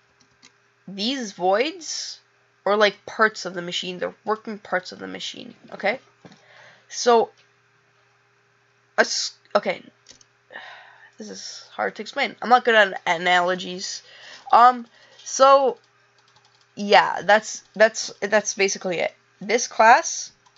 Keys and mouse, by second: 12.0 click.